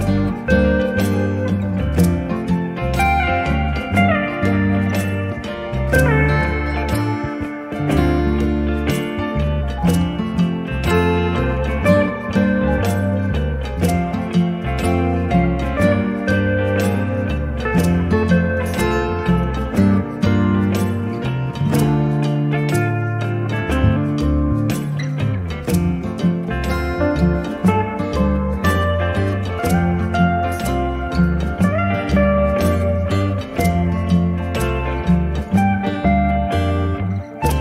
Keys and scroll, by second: 26.2 d.